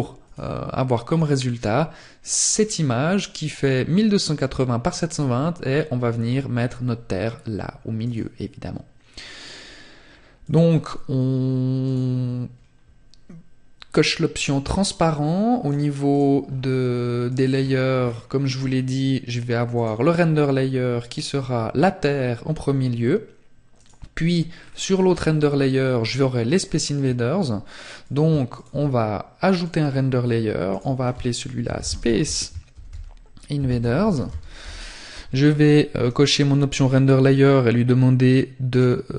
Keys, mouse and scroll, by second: 14.5 click, 15.3-16.1 scroll down 3, 16.1 click, 16.1-17.5 scroll down 3, 17.5 scroll down 7, 18.2-18.5 scroll up 2, 18.7 click, 22.6 click, 23.5-24.2 scroll down 2, 24.3-24.7 scroll down 2, 26.9 click, 27.4 shift+click, 28.5 click, 35.0 click, 37.6 click.